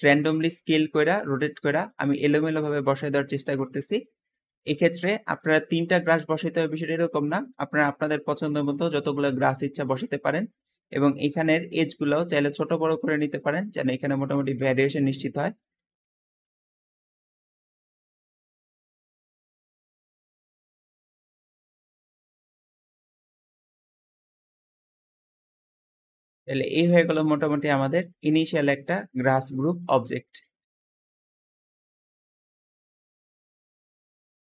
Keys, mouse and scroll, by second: 0.4 z, 1.2-2.7 middle drag, 2.7 g, 3.6 click, 4.0 r, 4.9-10.9 middle drag, 10.9-11.3 scroll up 1, 11.3 click, 11.7-13.3 middle drag, 13.3 shift+click, 13.7 shift+middle click, 14.1 scroll up 2, 14.8 shift+click, 15.7 middle click, 16.7 click, 17.1-25.4 typing, 17.2 click, 17.5 scroll down 3, 17.6 middle click, 17.9 middle click, 18.1 click, 18.7 click, 19.0 click, 20.0 click, 20.5 click, 20.6 middle click, 21.2 click, 21.7 middle click, 22.1 middle click, 23.4 click, 24.0 click, 25.2 middle click, 25.4 click, 25.5 shift+middle drag, 25.7 scroll down 2, 25.8 shift+middle click, 26.3 shift+click, 26.6-29.0 shift+middle drag, 29.0 `, 30.6 Escape, 34.0 shift+middle click, 34.3 shift+middle click.